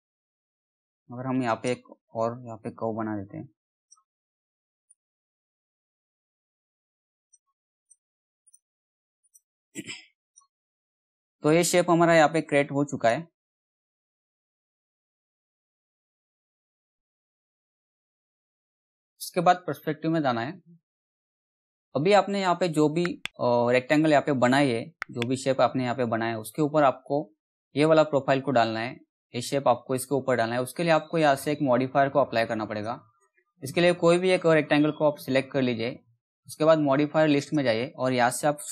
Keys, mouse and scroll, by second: 3.3-7.4 drag, 7.4 right click, 8.8 click, 10.5-11.9 scroll down 1, 11.9 t, 12.5 click, 15.4 z, 17.7 t, 19.6 p, 32.2 click, 36.8 click, 38.5 s.